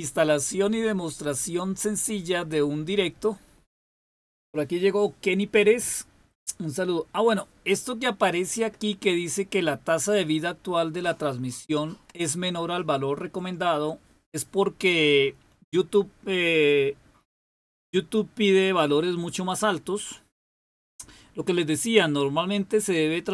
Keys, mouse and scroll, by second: 2.0-3.4 drag.